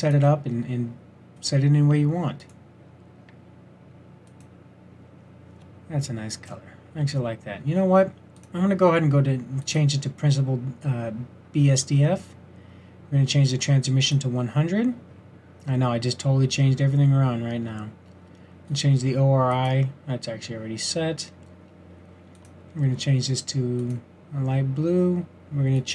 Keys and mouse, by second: 5.7 middle drag, 20.1 middle drag, 25.8 click.